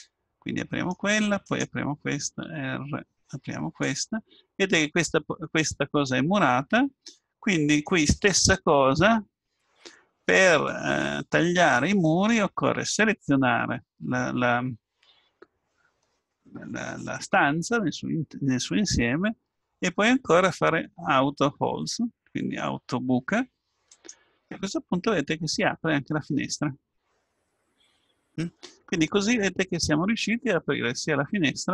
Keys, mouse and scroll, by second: 0.1 middle click, 1.4 click, 1.8-3.8 right drag, 2.4 r, 4.3-6.1 middle drag, 10.4-13.1 middle drag, 13.1-14.9 right drag, 23.9-25.2 drag, 25.0-27.3 middle drag.